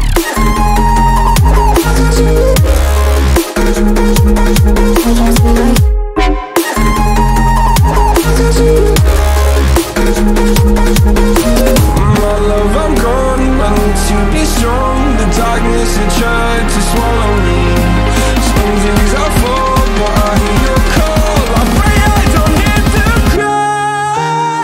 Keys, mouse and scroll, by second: 4.0 x, 4.7 click, 11.3-15.8 drag, 15.8 x, 16.5-20.1 drag.